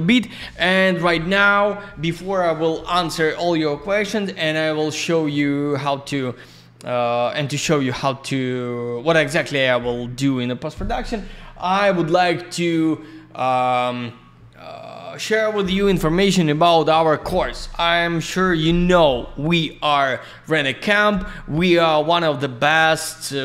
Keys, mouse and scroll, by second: 21.9 click, 22.0 click, 22.4 click.